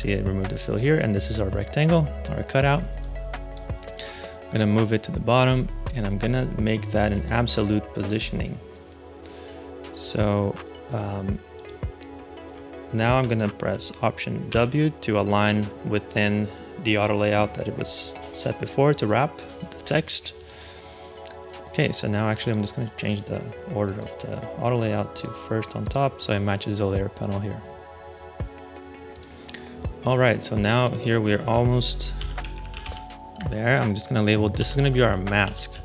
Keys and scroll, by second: 14.4 alt+w, 31.8-35.8 typing.